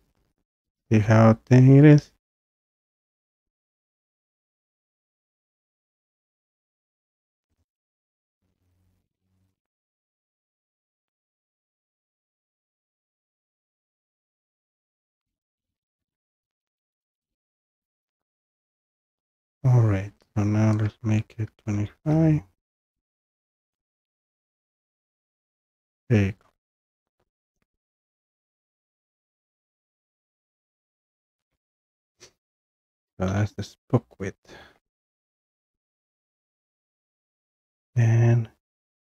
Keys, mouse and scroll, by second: 1.1 scroll, 1.6 scroll down 3, 4.2 scroll down 1, 4.9-6.7 scroll down 1, 7.6 click, 7.8 click, 10.2 click, 10.4 click, 11.7 click, 15.5 click, 17.0 click, 17.3 click, 20.8 click, 21.6-22.0 typing, 22.3 click, 24.9 scroll, 25.8 scroll, 30.9-31.4 scroll down 1, 31.4 b, 34.8-35.5 scroll down 1, 35.5-36.4 scroll down 1, 36.4-37.6 scroll down 1, 37.6 scroll down 1, 37.7 click.